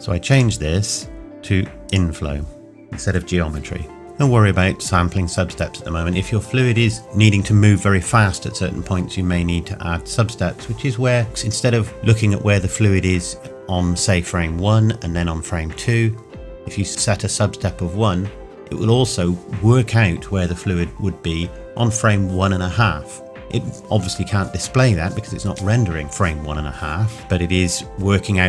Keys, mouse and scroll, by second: 0.3 click.